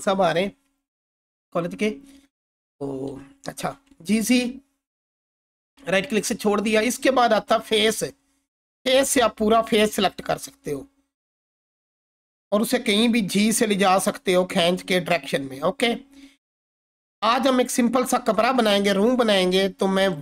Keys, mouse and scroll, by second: 3.5-4.5 typing, 5.4 right click, 7.5 click, 10.7-12.7 scroll down 1, 12.9 g, 14.7 x, 15.2 right click, 15.8-16.2 scroll up 1, 16.7-17.3 alt+click, 17.5-18.0 scroll up 1, 19.6-20.2 alt+click.